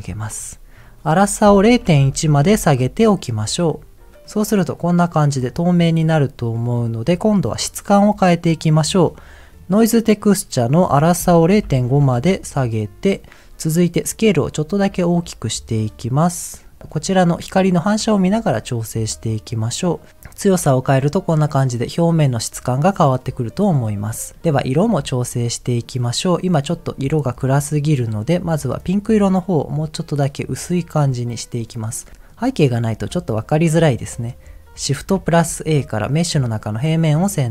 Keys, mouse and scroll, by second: 1.1-2.6 drag, 4.2-5.5 middle drag, 6.5 middle click, 7.2 middle click, 9.6 click, 10.8-12.1 drag, 14.1-16.7 drag, 16.8 middle click, 18.1 shift+middle click, 18.3-19.2 scroll up 2, 19.5-23.5 drag, 23.8-24.3 scroll down 2, 24.3 middle click, 24.4 scroll up 1, 24.6 shift+middle click, 25.4 middle click, 27.8 click, 31.2 click, 31.6 middle click, 32.1 scroll up 2, 32.5 middle click, 33.5 scroll down 1, 34.7 click, 34.7 scroll down 2, 35.1 shift+a.